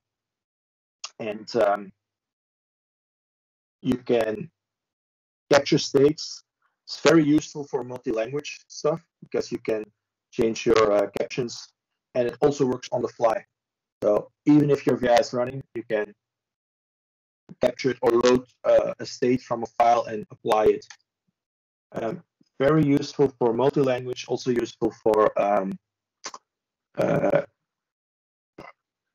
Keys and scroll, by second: 2.3 ctrl+m, 2.3 typing, 5.1 ctrl+space, 5.2-6.0 typing, 8.2-9.0 typing.